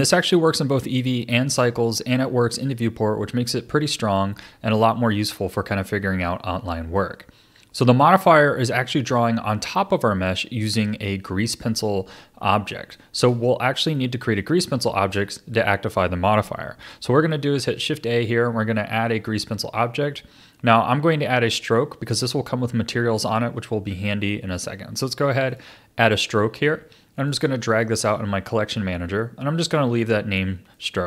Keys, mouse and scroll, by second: 4.7-8.8 middle drag, 11.0-17.5 middle drag, 17.5 shift+a, 27.3 drag, 30.7-31.0 middle drag.